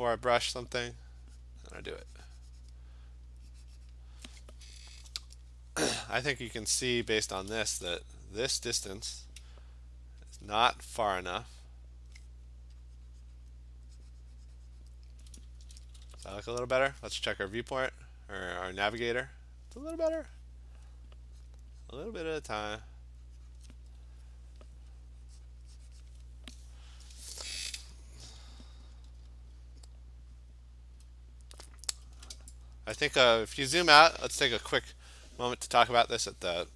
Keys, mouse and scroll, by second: 0.2 click, 1.4 click, 2.7 click, 3.9 click, 6.6-7.5 typing, 10.4 alt+click, 13.5 click, 14.9 click, 15.9 [, 16.0 [, 16.2 [, 21.5 click, 22.0 click, 22.3 click, 22.8 click, 23.6 click, 24.7 click, 25.5 click, 26.0 click, 27.9-31.0 scroll, 31.0 scroll, 31.5 scroll down 10, 33.0 click, 33.2-33.7 scroll, 33.2 x.